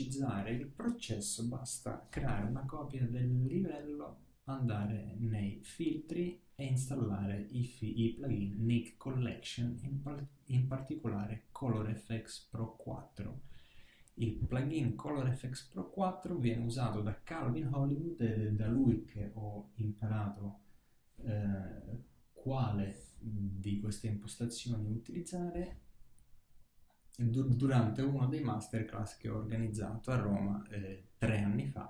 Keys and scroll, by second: 1.5 alt+shift+super+e.